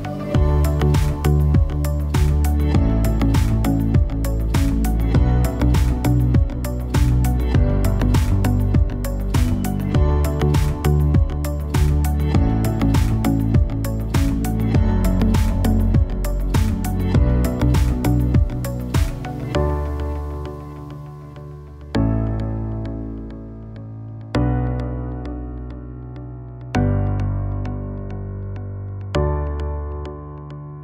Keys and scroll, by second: 20.9 shift+x, 23.9 0.